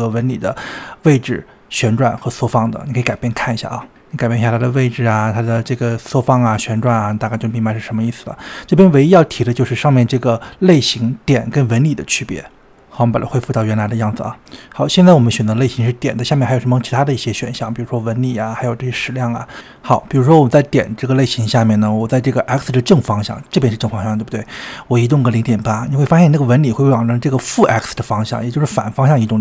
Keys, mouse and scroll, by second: 0.0-1.5 middle drag, 1.5 KP_7, 4.9-6.1 drag, 6.1-7.2 drag, 7.4-9.8 drag, 10.0-11.6 drag, 11.8 click, 13.0-14.2 drag, 15.8-19.0 drag, 21.8 scroll down 2, 24.8-27.7 drag, 28.7-29.4 drag.